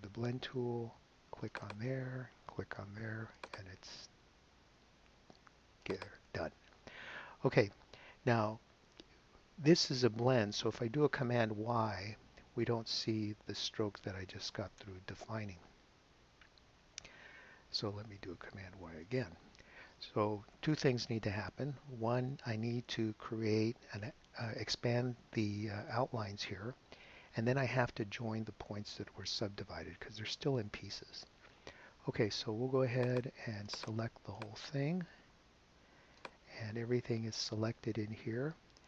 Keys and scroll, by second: 12.3 super+y, 18.7 super+y.